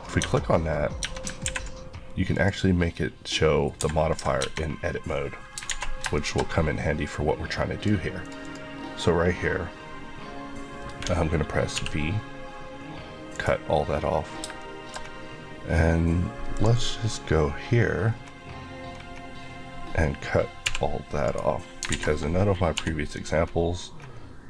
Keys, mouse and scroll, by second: 0.0 scroll up 1, 0.6 scroll up 1, 0.7 scroll, 1.0 Tab, 1.5 ctrl+`, 2.3 click, 3.8 Escape, 4.4 Tab, 5.0 scroll down 1, 5.1-5.6 scroll up 1, 5.7 alt+a, 6.2 shift+middle click, 6.5 shift+middle click, 7.8 click, 8.5 click, 11.8 v, 13.3 right click, 14.6 shift+middle click, 16.6 click, 16.8 Left, 17.3-18.9 scroll down 1, 18.9-19.8 scroll, 19.8-20.7 scroll up 1, 20.7 v, 21.3 right click, 21.9 alt+a, 22.8 l, 23.3 scroll up 1.